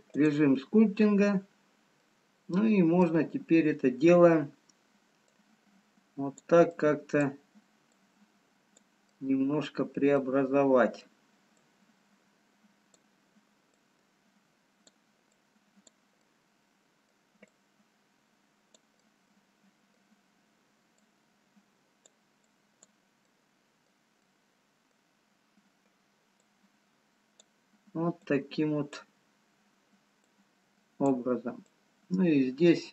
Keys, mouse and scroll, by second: 2.4 middle click, 2.4-2.9 scroll down 3, 5.3 click, 7.2 click, 10.0 click, 10.0 middle click, 10.6 middle click, 11.6 click, 13.8 click, 16.1 click, 16.1 middle click, 17.5 click, 18.9 middle click, 21.2 click, 22.4 click, 23.3 middle click, 25.7 middle click, 25.7 scroll up 2, 26.6 click, 28.5-32.9 click.